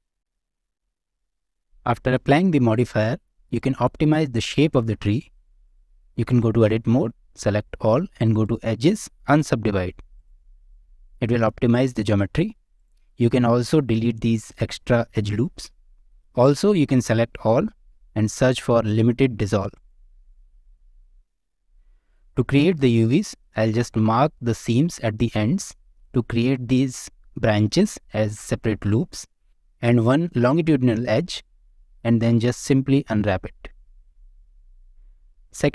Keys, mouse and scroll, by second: 0.0 Tab, 0.0 click, 0.2 e, 0.5 ctrl+a, 0.7 middle click, 0.8 Tab, 0.9 click, 0.9 middle click, 1.1 shift+middle click, 1.3-2.1 scroll up 1, 3.5 click, 4.6 Tab, 5.2 shift+middle click, 8.4-10.2 drag, 10.7 middle click, 12.1 middle click, 12.7 click, 17.9 F3, 20.3-21.6 middle drag, 23.4 middle click, 23.9 scroll up 1, 24.3 shift+middle click, 29.2 middle click, 32.8 scroll down 1, 33.1-34.5 middle drag.